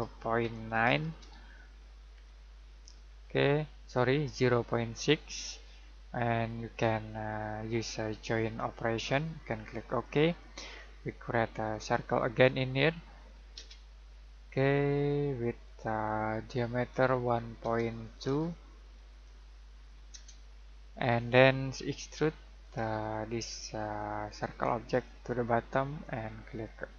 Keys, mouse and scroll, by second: 0.4 typing, 1.9-2.6 typing, 9.9 click, 10.6-11.7 scroll down 1, 11.7 click, 13.5 c, 15.6 click, 17.6 typing, 18.9-19.6 typing, 20.1 Return, 22.6 click.